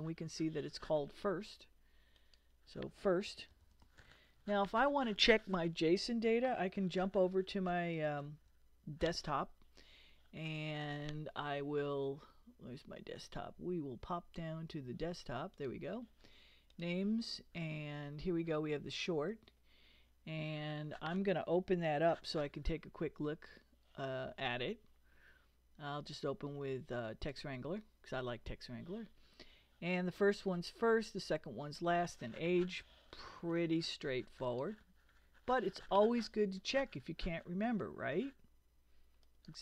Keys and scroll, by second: 3.1-4.5 typing, 6.8 super+Tab, 8.0 super+Tab.